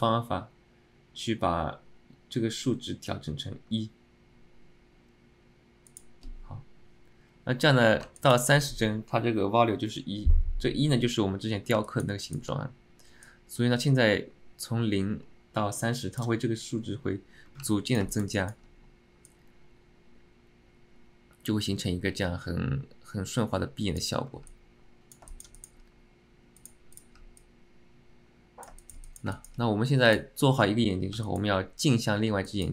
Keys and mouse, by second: 8.3 click, 11.9 alt+middle click, 12.4 shift+middle click, 13.4-16.4 drag, 17.8-18.1 alt+middle drag, 18.2 alt+shift+middle click, 18.5 middle click, 24.6-25.3 alt+middle drag, 25.4 alt+shift+middle click, 25.7 alt+middle click, 27.5-28.8 alt+middle drag, 28.9 alt+shift+middle click, 29.2 alt+middle drag, 29.5 alt+shift+middle click, 31.3 middle click, 32.6 alt+shift+middle click.